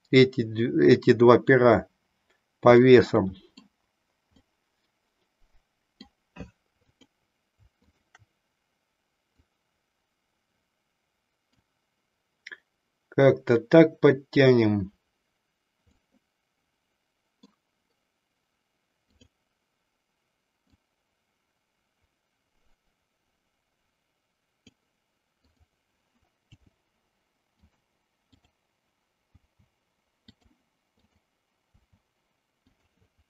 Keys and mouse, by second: 2.8 middle click, 4.4-6.2 middle drag, 6.9 click, 7.8 shift+click, 9.4-11.7 drag, 15.9-17.7 middle drag, 19.0 click, 20.7-24.8 drag, 25.5 click, 26.4 g, 27.7 click, 28.3 click, 29.4 g, 30.4 click, 30.9 click, 32.8 click.